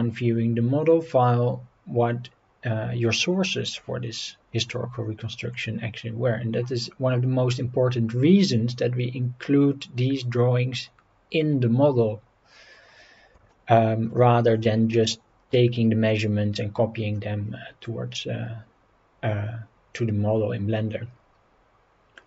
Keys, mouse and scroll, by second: 12.9 scroll down 2, 13.5-14.1 shift+middle drag, 16.8 scroll up 1.